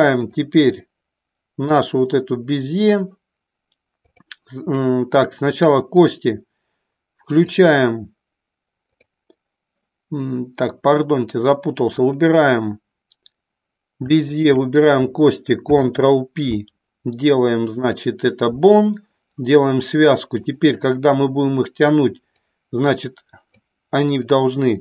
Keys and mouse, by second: 0.3-0.9 drag, 1.6 click, 4.1 click, 8.9 click, 12.0 click, 14.3 shift+click, 15.5 ctrl+p, 22.3-23.6 drag, 24.1 click.